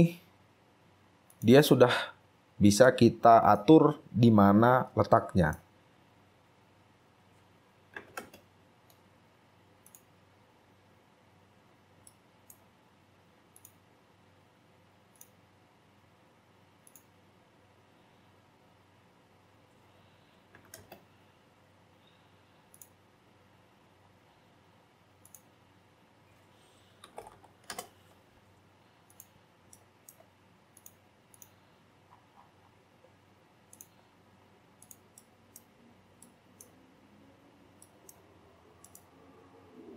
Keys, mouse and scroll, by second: 0.3 scroll down 1, 2.1-3.0 scroll down 8, 3.0 right click, 4.1-4.5 scroll up 1, 5.3 right click, 10.4 typing, 10.4-11.1 scroll up 6, 11.9 scroll down 1, 12.2 shift+right click, 17.6-19.6 scroll up 12, 19.6 scroll up 2, 20.7 typing, 23.8-24.6 scroll up 10, 25.8-27.2 scroll up 5, 27.1-28.0 typing, 29.5 scroll down 2, 29.9 shift+right click, 32.0-33.4 scroll down 19, 34.4 scroll down 3, 35.3 right click, 35.9 right click, 35.9 scroll up 2, 36.4 shift+right click, 37.0 scroll down 2, 38.0 shift+right click.